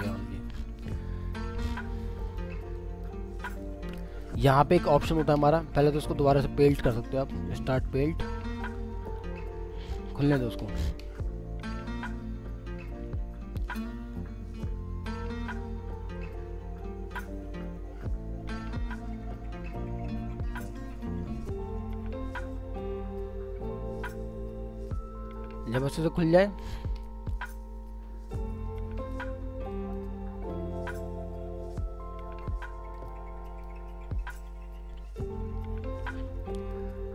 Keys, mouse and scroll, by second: 0.4 scroll down 1, 2.2 double click.